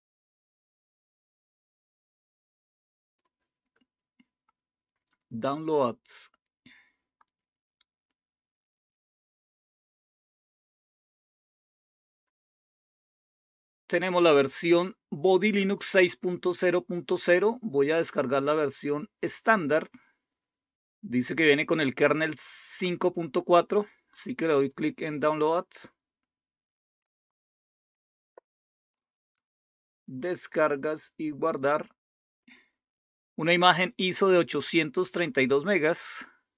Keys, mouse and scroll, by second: 2.1-3.0 scroll up 2, 3.2 click, 24.6 click, 25.0 click, 29.3 click, 32.3 click.